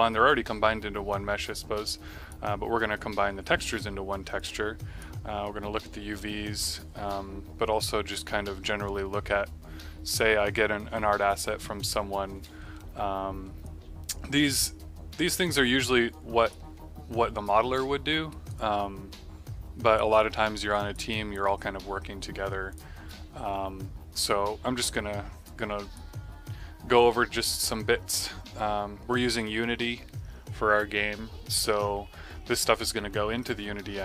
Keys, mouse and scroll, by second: 7.7 click, 13.6 click, 15.5 click, 18.2 right click, 18.5 click, 20.1 click, 22.6 click, 24.9 middle click, 25.4 click, 27.4 click.